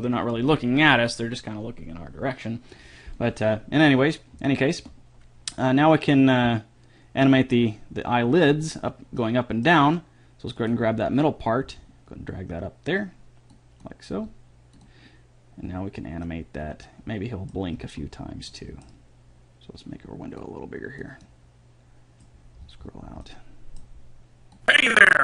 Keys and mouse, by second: 4.6 middle click, 8.8-10.7 right drag, 9.4-10.7 drag, 9.4-10.7 middle drag, 11.8 g, 14.4 g, 16.4-19.1 middle drag, 20.6 click, 21.6-22.6 middle drag, 24.9-25.2 drag.